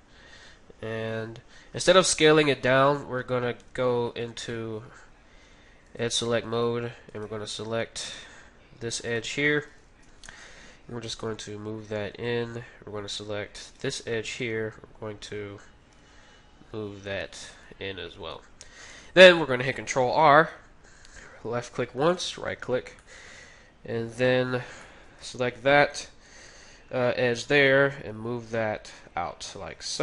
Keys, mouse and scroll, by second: 3.7 ctrl+Tab, 7.1-8.7 right drag, 8.1-9.7 middle drag, 9.0-10.6 right drag, 9.9 KP_3, 11.1 g, 13.6-15.5 right drag, 15.9 g, 20.0 ctrl+r, 22.1 ctrl+r, 23.0-26.7 middle drag, 24.1-26.0 right drag, 25.2 KP_3, 27.5 g.